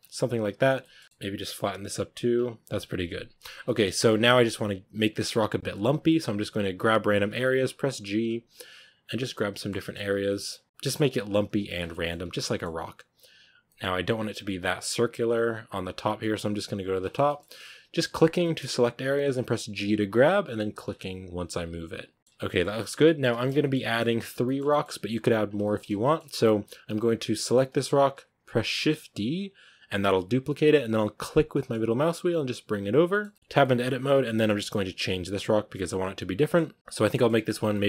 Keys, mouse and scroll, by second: 0.0 g, 0.7 middle click, 0.9 scroll up 1, 1.0-1.6 middle drag, 1.6 right click, 1.7 g, 3.4 scroll down 2, 3.5-5.2 shift+middle drag, 5.2-5.6 scroll up 1, 5.6-5.9 right drag, 5.9 scroll up 2, 5.9 middle drag, 6.8 g, 8.1 right click, 8.3 g, 8.9 right click, 9.0 g, 9.4 shift+middle click, 10.0 right click, 10.1 g, 10.6 right click, 10.7 middle click, 11.1 right click, 11.2 g, 11.6 scroll down 1, 11.6 Tab, 11.8-12.1 middle drag, 12.1 Tab, 12.2-12.9 middle drag, 12.9 right click, 13.1 g, 13.5-14.2 middle drag, 14.2 right click, 14.2 g, 14.9 right click, 15.0 g, 15.6 right click, 15.8 g, 16.4 right click, 16.6 g, 16.9 scroll down 1, 17.0-18.0 middle drag, 18.0-18.3 right drag, 18.3 shift+middle click, 18.4-18.9 scroll up 2, 18.9 g, 20.1 right click, 20.3 g, 21.8 right click, 21.9 g, 22.2-25.3 middle drag, 25.3 scroll down 1, 25.5-28.5 shift+middle drag, 28.5 shift+d, 33.0-33.3 shift+middle drag, 33.3 Tab, 33.5-34.0 middle drag, 34.0 right click, 34.2 g, 35.6 right click, 35.8 g, 36.3 middle click, 36.6 right click, 36.8 g, 36.9 scroll down 1, 37.0 middle drag, 37.2 g, 37.5 scroll down 1, 37.6-37.8 middle drag.